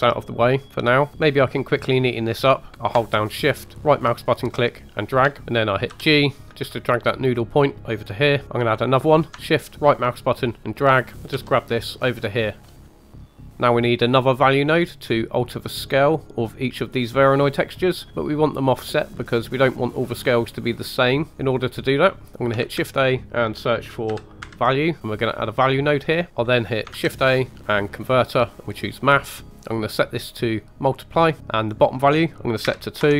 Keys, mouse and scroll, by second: 1.1 scroll up 1, 3.8 shift+right click, 5.4 shift+middle click, 5.4-5.8 scroll up 2, 5.8 g, 8.4 ctrl+\, 8.4 ctrl+z, 9.6 shift+right click, 11.3 g, 12.6 click, 12.8 g, 13.5 middle click, 13.5 scroll down 4, 13.6 middle click, 14.6-15.2 scroll up 5, 16.2 click, 17.8 click, 19.0 middle click, 19.9 middle click, 20.7 click, 21.3 middle click, 21.8 middle click, 22.6 shift+a, 25.3 click, 26.9 shift+a, 29.3 click, 30.1-31.4 drag, 31.6-33.0 drag.